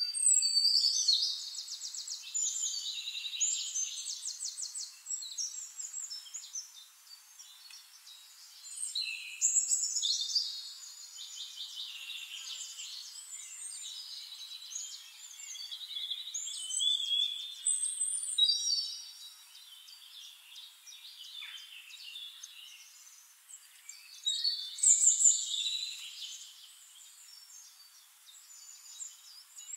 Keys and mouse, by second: 0.6 drag, 1.3 ctrl+click, 2.4 click, 3.0 ctrl+click, 3.5 ctrl+click, 4.5 ctrl+shift+click, 5.3 ctrl+shift+click, 6.1-7.8 drag, 8.1 drag, 8.7 shift+-, 9.7 click, 10.1 ctrl+click, 10.9 ctrl+drag, 11.3-11.6 ctrl+middle drag, 12.6 click, 13.7 shift+-, 14.5-15.2 drag, 15.5-15.9 drag, 17.3 click, 18.1 click, 18.6 click, 20.0 click, 21.0 KP_8, 21.2 Return, 22.2 click, 22.8 middle click, 24.1 click, 27.4 click, 28.5 ctrl+click, 29.6 right click.